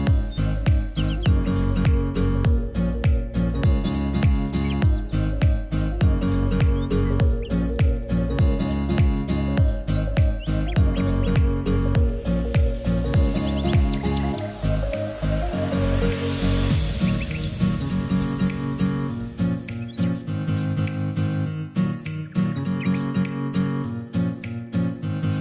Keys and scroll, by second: 1.1 alt+g, 1.5-2.4 typing, 14.0 0, 14.0 Tab, 14.2 0, 14.4 Return, 19.1 0, 19.3 Return, 24.7 t.